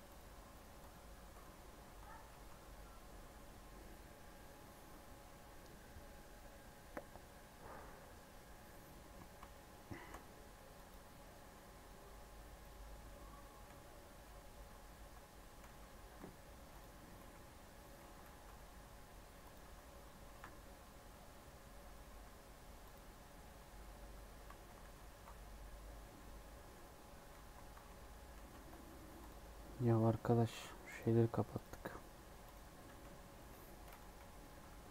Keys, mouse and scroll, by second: 0.5 right click, 1.1 scroll down 1, 1.8 scroll down 5, 2.3 z, 9.1 scroll down 1, 9.5 shift+middle click, 9.9 shift+a, 11.4 s, 13.6 x, 14.1 x, 14.7 z, 15.6 s, 17.1 KP_1, 18.2 g, 20.3 1, 22.0 1, 22.8 click, 23.3 scroll up 1, 23.5 Tab, 24.4 alt+z, 24.8 alt+z, 26.1 scroll down 2, 26.4 middle click, 26.8-27.3 scroll down 6, 27.3 z, 28.3 alt+z, 28.8 Tab, 29.1 click, 29.4-30.2 scroll up 3, 30.8-32.8 drag, 32.8 s, 34.0 KP_1, 34.5-34.9 scroll up 4.